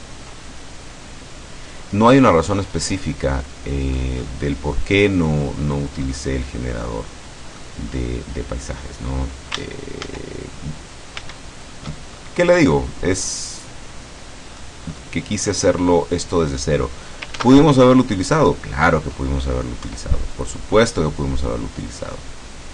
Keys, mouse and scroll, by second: 2.1-2.7 scroll down 2, 3.1-3.5 scroll up 2, 3.5 click, 4.3-6.0 scroll down 2, 6.9-7.9 drag, 7.9-9.7 scroll up 2, 10.1 ctrl+shift+z, 11.3 ctrl+shift+z, 12.2-12.9 ctrl+shift+scroll down 3, 12.9-14.9 middle drag, 17.5 ctrl+s, 17.7 ctrl+click, 18.7-19.8 scroll down 1, 19.9 KP_1.